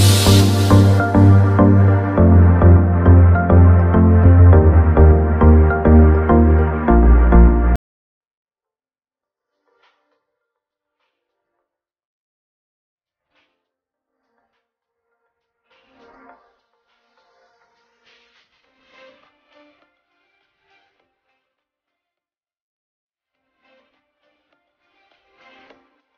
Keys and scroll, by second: 2.4 shift+space, 14.4 ctrl+z, 14.9 shift+space, 19.6 shift+space.